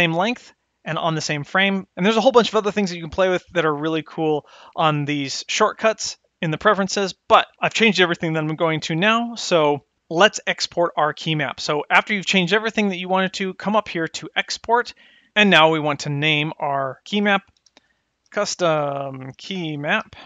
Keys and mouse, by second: 1.5 click, 14.7 click.